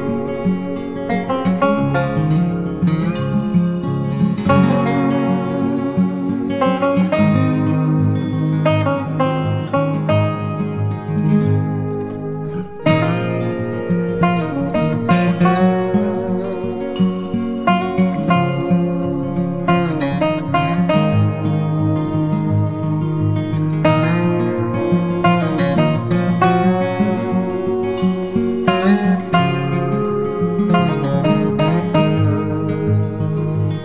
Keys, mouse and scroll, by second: 1.6 ctrl+click, 3.3 ctrl+click, 5.2 Return, 11.3-12.5 typing, 13.2 double click, 25.2 double click, 29.3 double click.